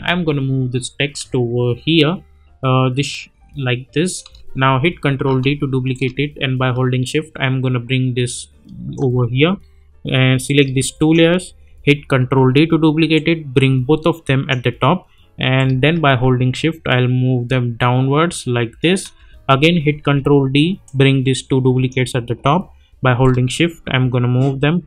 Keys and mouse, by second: 5.2 ctrl+d, 5.9-9.0 drag, 11.0 shift+click, 12.2 ctrl+d, 13.1-14.7 drag, 19.9 ctrl+d, 20.8-22.1 drag.